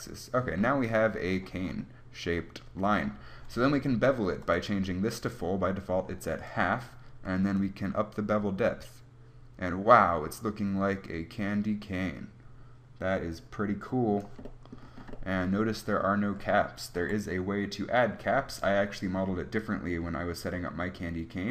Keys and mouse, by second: 8.7 click, 8.7-14.6 right drag, 17.3 KP_1.